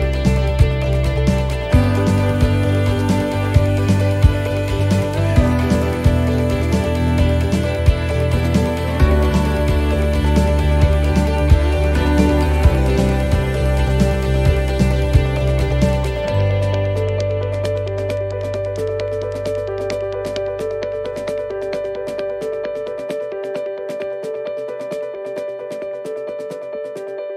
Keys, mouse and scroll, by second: 0.3 scroll up 3, 0.6 shift+middle click, 1.3 middle click, 6.2 scroll down 2, 6.6 shift+middle click, 7.1 middle click, 7.7 scroll down 1, 8.8 click, 9.8 shift+middle click, 10.7 scroll up 4, 11.1 middle click, 12.3 right click, 12.7 middle click, 13.7 click, 14.1 click, 15.3 middle click, 15.8 middle click, 16.9 right click, 19.8 right click, 19.8 l, 20.3 middle click, 21.5 click, 23.0 middle click, 25.3 right click, 26.5 l.